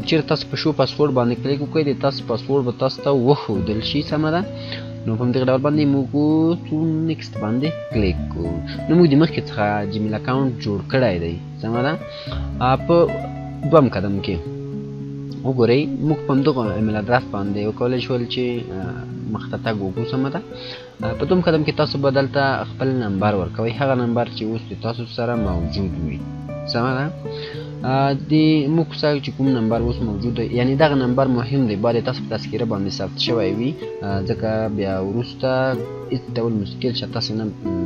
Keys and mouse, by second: 0.2 F9, 2.4-6.1 drag, 6.7 click, 21.6 click.